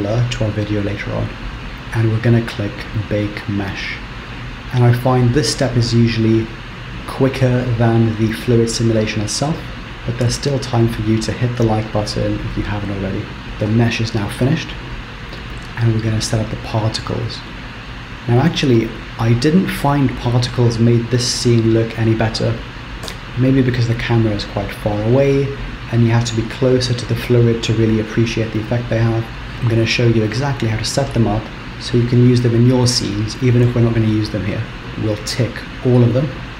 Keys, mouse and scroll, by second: 2.9 click, 14.4-17.2 scroll down 7, 17.2 click, 17.8-20.5 scroll down 5, 20.5-21.4 scroll down 1, 23.1 KP_0, 36.0 click.